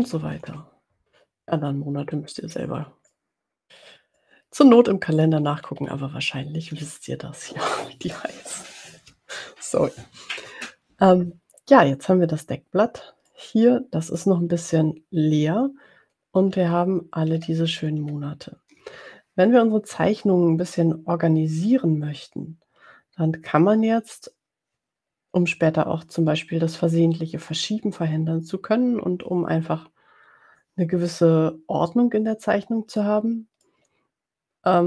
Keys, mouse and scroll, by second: 0.0-1.1 typing, 2.6 click, 3.1 middle click, 4.1-5.7 middle drag, 5.8 ctrl+scroll up 2, 6.3-6.9 ctrl+scroll down 2, 13.2-14.4 drag, 16.5-17.1 ctrl+scroll down 2, 17.4 ctrl+scroll up 2, 18.0-18.4 ctrl+scroll up 2, 33.4-33.8 middle drag.